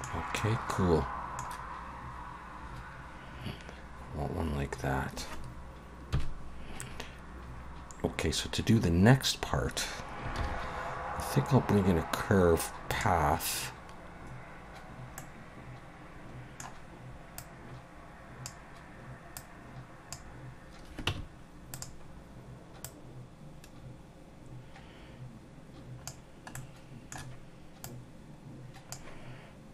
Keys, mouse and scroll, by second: 0.4 middle click, 6.1 KP_1, 10.4 shift+a, 15.2 middle click, 17.4 click, 19.4 click, 21.1 Tab, 21.7 click, 22.8 click, 26.5 middle click, 27.8 click.